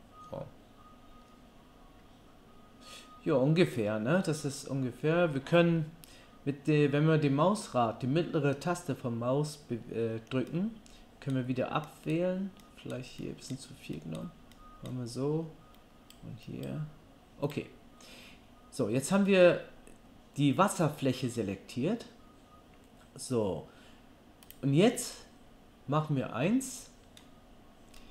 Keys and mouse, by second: 24.5-28.1 middle drag.